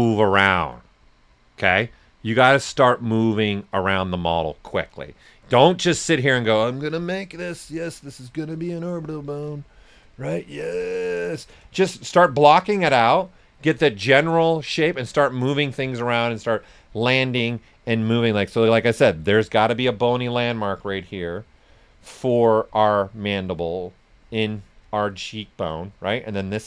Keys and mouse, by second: 4.8 right click, 6.8 s, 6.9 click, 7.4 right click, 8.4 alt+click, 10.6-13.4 alt+drag, 13.4 right click, 14.2 shift+click, 14.7 right click, 16.0 click.